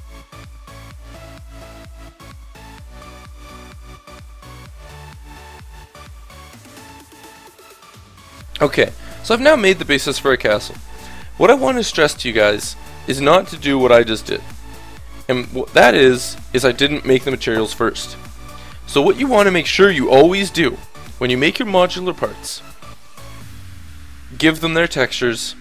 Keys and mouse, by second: 0.0-6.7 typing, 0.8 Tab, 1.1 Delete, 1.4 Tab, 1.8 Delete, 1.8 Tab, 1.9 Tab, 2.1 Tab, 4.2 click, 4.7 Delete, 5.1 Tab, 5.2 click, 5.5 Tab, 5.7 click, 6.1 Tab, 7.7 ctrl+z, 7.7 s, 7.9 Tab, 8.3 Return, 9.5-12.1 drag.